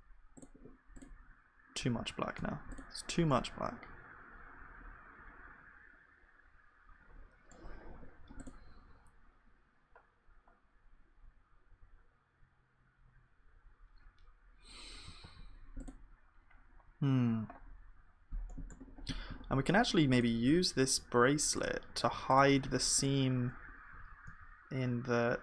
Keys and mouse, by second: 2.0 ctrl+z, 3.4-4.7 drag, 4.7 middle click, 8.0 KP_1, 9.9-11.3 drag, 15.2 ctrl+s, 17.7-18.9 drag, 18.9-23.9 middle drag, 23.9 g.